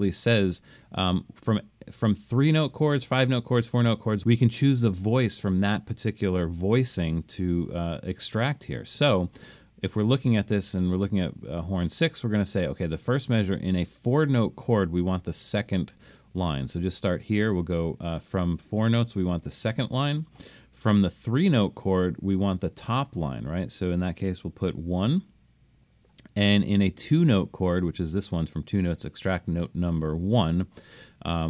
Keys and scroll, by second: 19.5 2, 25.1 1, 30.3 1.